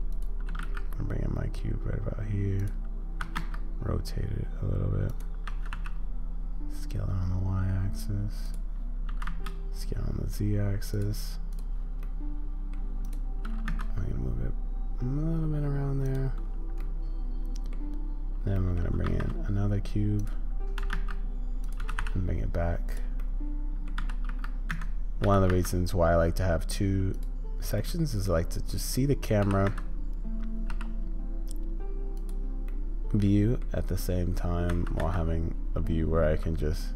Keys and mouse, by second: 3.2 r, 12.0-12.7 middle drag, 13.0-16.8 drag, 16.8 middle click, 17.4 middle click, 18.5 middle click, 19.0 shift+a, 20.7 g, 23.2-23.9 middle drag, 27.9-28.3 middle drag, 32.7-36.9 middle drag.